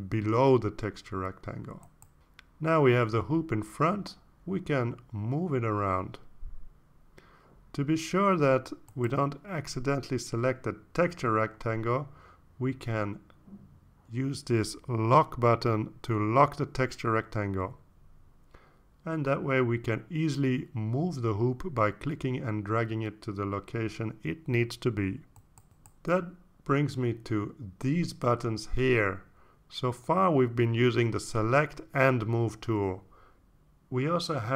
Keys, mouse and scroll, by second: 1.1-3.0 drag, 6.4 click, 7.1-8.2 drag, 16.8 click, 18.5 click, 21.0-28.5 drag, 29.4 click.